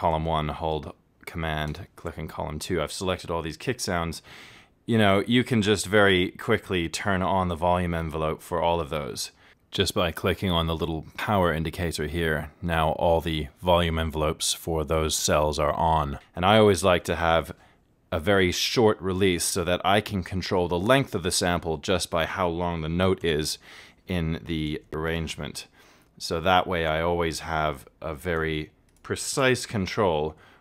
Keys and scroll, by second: 30.0 super+a.